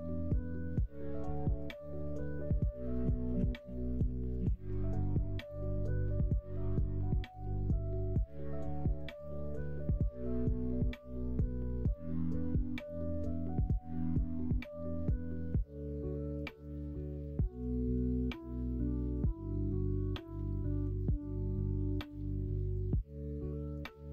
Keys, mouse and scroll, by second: 2.2 ctrl+z, 2.4 ctrl+z, 2.6 ctrl+z, 2.9 ctrl+z, 3.2 ctrl+z, 3.5 ctrl+z, 3.9 ctrl+z, 4.3 ctrl+z, 4.6 ctrl+z, 5.5 click, 6.5 2, 6.6 click, 7.4 g, 9.1 click, 9.8 middle click, 10.3 middle click, 10.9-11.9 drag, 11.9 middle click, 15.4 3, 17.9 2, 18.0 click, 19.1 e, 20.8 1, 21.1 click, 22.0 shift+click, 22.6 click, 23.3 click, 23.7 middle click.